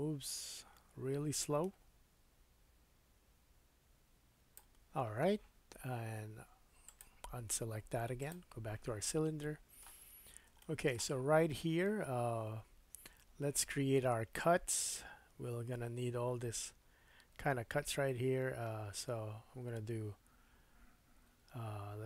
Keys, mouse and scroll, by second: 7.0-8.2 middle drag, 8.2 click, 8.3-21.3 middle drag, 10.0 scroll up 3, 21.3 Tab.